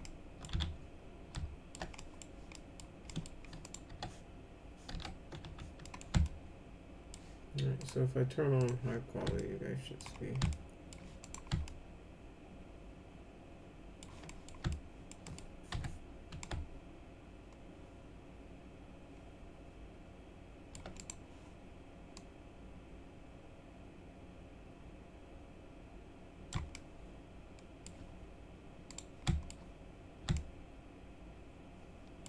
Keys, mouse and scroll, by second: 0.0 alt+middle click, 0.5 z, 1.3 alt+shift+middle click, 1.9 middle click, 2.5 middle click, 3.1 middle click, 3.6 click, 3.9 o, 4.9 p, 5.4 z, 5.8 middle click, 6.2 alt+middle click, 7.7 click, 8.5 click, 9.3 alt+middle click, 10.5 alt+middle click, 11.2 click, 11.6-14.0 alt+middle drag, 14.3 middle click, 14.7 alt+middle click, 15.2 middle click, 15.7 F4, 16.4-20.7 alt+middle drag, 20.9 click, 22.1-26.5 drag, 26.7-27.8 alt+middle drag, 28.9 click, 29.2 alt+middle click, 30.3-32.2 alt+middle drag.